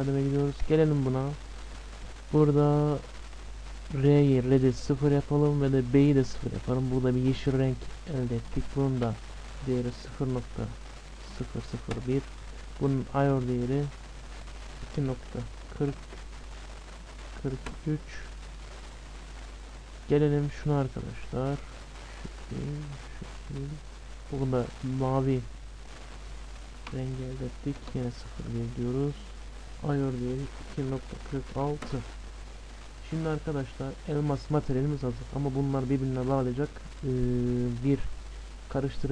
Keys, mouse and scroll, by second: 0.6-2.5 drag, 8.0-9.9 drag, 13.1-15.1 drag, 16.9 BackSpace, 18.7-20.4 middle drag, 20.0-21.9 drag, 25.9-27.8 drag, 32.8-35.7 middle drag.